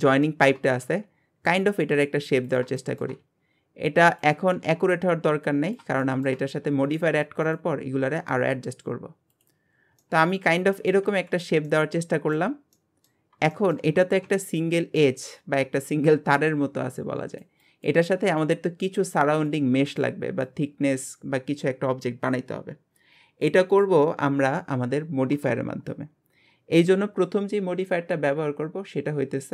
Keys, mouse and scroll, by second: 0.2 shift+middle click, 0.8 e, 2.8 shift+middle click, 3.2 e, 4.4 e, 6.0 shift+middle click, 6.6 e, 9.7 scroll down 3, 10.0-11.1 middle drag, 11.1 alt+z, 11.7 middle click, 12.5 Tab, 12.7 middle click, 13.3 scroll up 2, 13.5 shift+middle click, 13.9 scroll up 2.